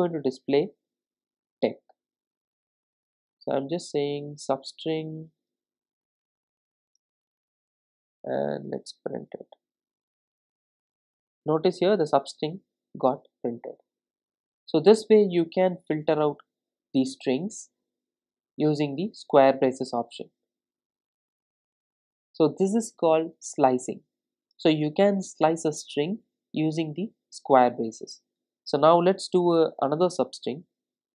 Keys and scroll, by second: 10.2 ctrl+r, 28.9 super+d.